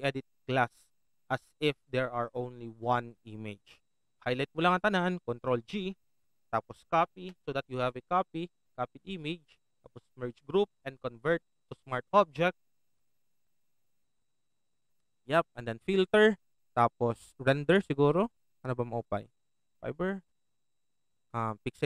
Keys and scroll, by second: 5.6 ctrl+g, 7.0 ctrl+j.